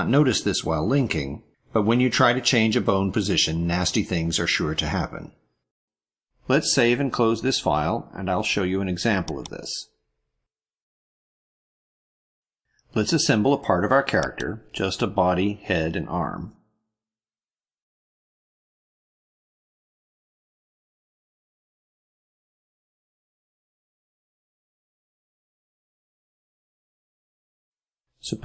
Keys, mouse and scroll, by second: 7.9 click, 8.9 click, 10.5 click, 11.1 click, 14.1 click, 15.4 click, 16.0 click, 17.4 ctrl+click, 18.3-18.8 ctrl+drag, 18.8 scroll down 1, 19.2 scroll up 1, 19.4 scroll down 1, 19.7 scroll up 2, 19.9 ctrl+click, 20.4 ctrl+click, 20.8 ctrl+click, 21.7 click, 22.2 click, 22.9 shift+click, 23.7 click, 24.1 click, 24.4 click, 25.2 click, 25.5 click, 26.1 click, 26.9 click, 27.2 click.